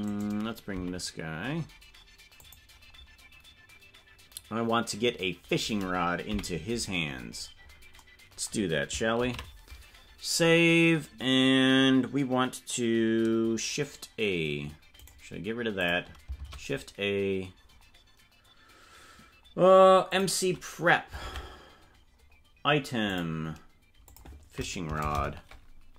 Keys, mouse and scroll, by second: 0.0 right click, 0.7 g, 6.2 KP_Decimal, 7.0-7.8 scroll down 13, 7.9 scroll up 1, 12.0 ctrl+s, 15.7 click, 16.3 shift+a, 20.0 click, 21.2 ctrl+Tab, 22.0 scroll down 1, 23.0 scroll down 3, 23.0 click, 24.0-25.9 drag, 24.9 BackSpace.